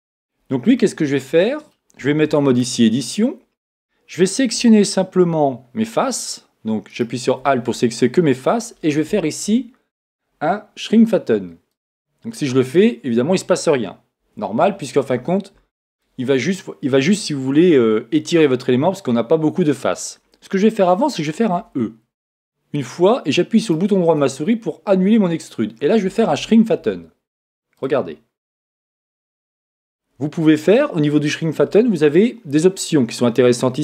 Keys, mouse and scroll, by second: 2.2 Tab, 4.6 a, 6.9-8.6 right drag, 11.7-13.5 drag, 21.6 e, 23.7-25.5 right drag, 27.7-29.7 drag.